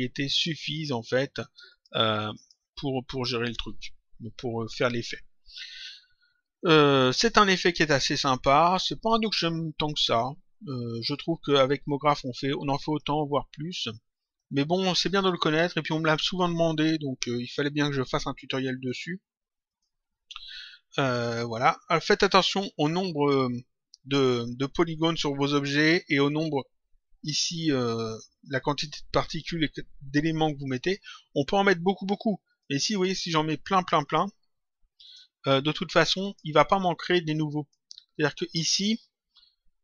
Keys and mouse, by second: 0.2 click, 1.6 click, 8.8 click, 11.3 click, 14.2 click, 18.6 click, 23.1 click, 32.4 click, 34.0 click, 36.1 click, 37.4 click.